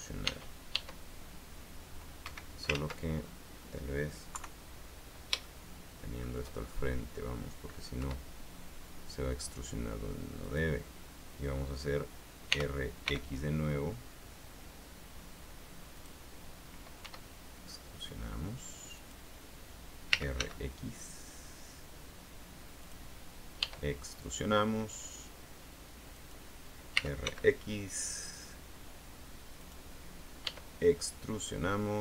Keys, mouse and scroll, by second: 0.4 e, 2.4 Escape, 3.3 ctrl+z, 3.3-3.6 scroll down 2, 4.5 KP_3, 5.6 shift+middle click, 6.7-7.1 shift+scroll up 2, 8.1 e, 10.6 click, 12.7 r, 13.2 x, 16.1 click, 17.1 e, 19.1 click, 20.0-21.0 typing, 22.9 click, 23.7 e, 26.3 click, 27.1 r, 27.4 x, 29.7 click, 30.5 e.